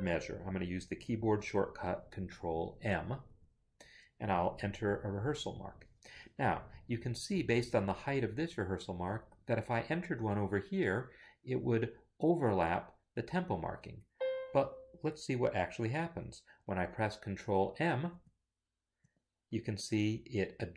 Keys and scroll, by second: 3.3 ctrl+m, 4.6 shift+a, 5.3 Escape, 18.5 ctrl+m.